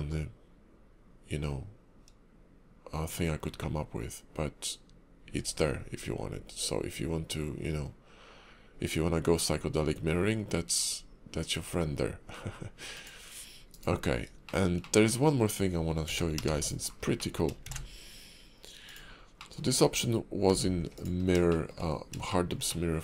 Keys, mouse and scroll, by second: 13.4 scroll up 2, 14.1 scroll down 3, 14.4 shift+middle click, 14.8 middle click, 16.0 a, 16.4 x, 16.9-17.5 scroll down 3, 17.2 middle click, 17.6 shift+a, 19.4 middle click, 19.7 scroll up 4, 20.5 s, 21.2 scroll down 2, 21.5 shift+middle click, 21.8-22.3 scroll up 3, 22.3 shift+middle click, 22.7 middle click.